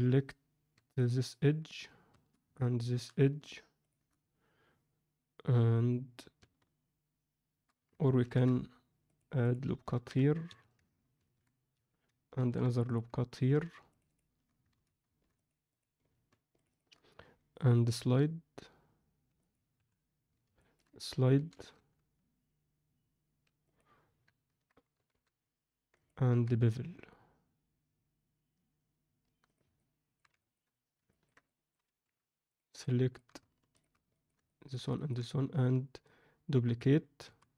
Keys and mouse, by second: 0.7 2, 0.9 click, 2.5 middle click, 3.8 shift+click, 8.2 ctrl+r, 9.8 ctrl+v, 11.2 ctrl+b, 12.3 ctrl+r, 13.8 shift+click, 14.7 ctrl+z, 15.3 click, 15.6 click, 16.5 shift+click, 17.8 g, 19.7 KP_1, 20.5 ctrl+middle click, 21.3 g, 24.9 g, 26.2 ctrl+b, 29.7 middle click, 30.3 ctrl+alt+middle click, 31.0 ctrl+middle click, 31.4 alt+middle click, 32.0 3, 32.4 click, 32.8 alt+middle click, 33.7 shift+click, 34.1 ctrl+middle click, 34.4 alt+middle click, 34.9 ctrl+middle click, 37.2 shift+d.